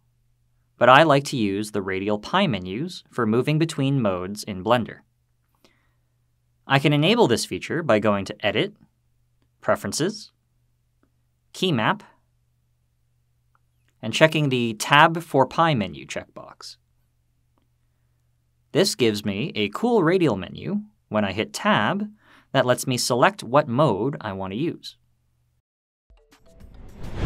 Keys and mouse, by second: 8.6-10.4 drag, 21.5 Tab, 25.5 Tab.